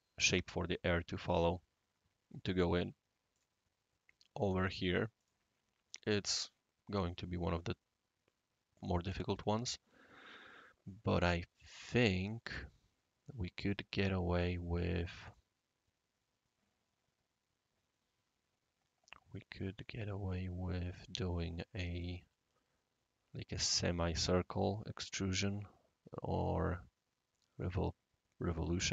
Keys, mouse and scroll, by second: 0.9 right click, 3.3 click, 5.1 click, 5.9-8.8 right drag, 9.2-9.5 middle drag, 11.9 click, 15.3-22.0 right drag.